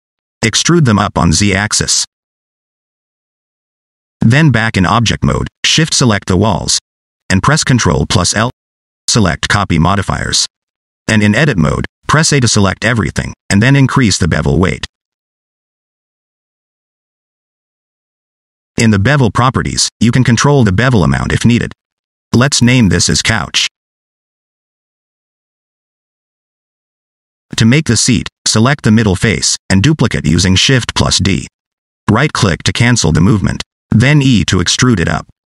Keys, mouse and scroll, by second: 0.0 shift+click, 1.2 e, 4.9 Tab, 5.3 shift+middle click, 5.7 middle click, 6.3 scroll down 1, 6.5 shift+click, 7.7 ctrl+l, 10.5-11.0 scroll up 2, 11.0 click, 11.4 middle click, 12.4 Tab, 12.9 a, 14.1 click, 16.4 Tab, 16.9 middle click, 18.8 click, 19.6 shift+click, 21.0 middle click, 21.9 right click, 22.7 middle click, 23.5 F2, 26.4 Tab, 26.8 shift+middle click, 28.0 click, 30.4 shift+d, 33.2 middle click, 34.1 click, 34.4 e.